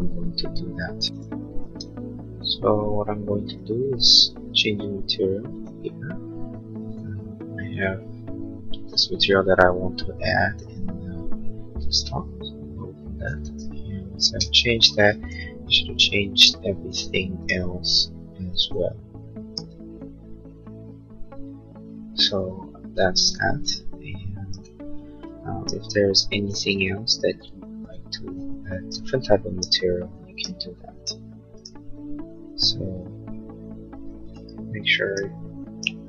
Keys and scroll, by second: 14.1 space, 26.7 b.